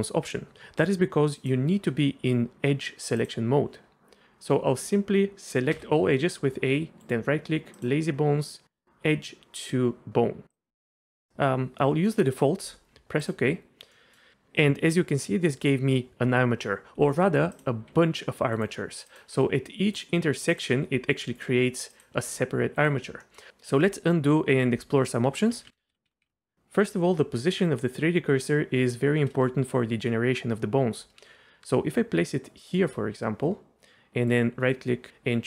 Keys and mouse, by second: 3.2 click, 5.7 a, 7.1-13.3 drag, 13.9 middle click, 17.9 g, 18.5-19.3 drag, 19.3 g, 20.5 click, 20.7 g, 21.4 click, 22.2 g, 22.8 click, 23.2 middle click, 25.5 ctrl+z, 25.7 ctrl+z, 26.0 ctrl+z, 26.1 ctrl+z, 26.2 ctrl+z, 32.5 shift+click, 34.3-35.4 drag.